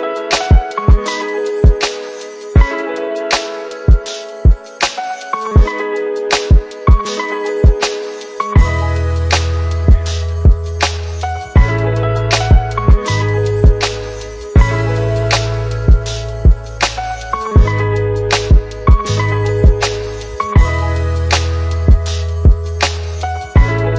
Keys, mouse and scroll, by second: 2.6 click, 3.0 ctrl+v, 6.2 s, 7.3 click, 8.9 click, 10.6-11.6 click, 19.4 click, 21.1 click.